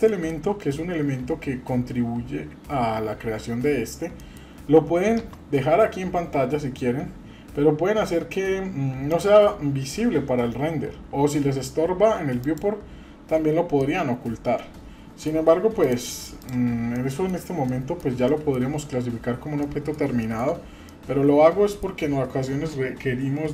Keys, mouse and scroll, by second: 0.1-0.4 shift+middle drag, 4.2 middle click, 9.1 click, 12.4 click, 13.3-13.8 scroll down 2, 13.8-15.2 middle drag, 15.8 click, 16.4 click, 16.9-17.3 middle drag, 17.7-18.0 middle drag, 18.3 shift+middle drag, 19.0 scroll up 1, 19.6-20.0 middle drag, 20.2 shift+middle click, 20.7 scroll down 1, 20.8-21.8 middle drag.